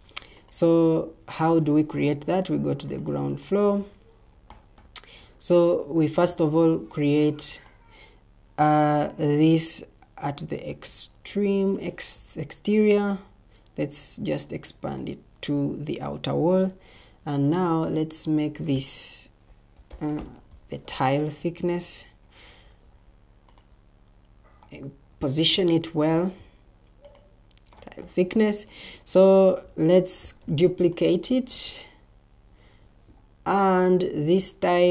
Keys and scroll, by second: 1.2 Escape, 16.3 ctrl+t, 19.4-20.3 typing, 29.9 ctrl+d.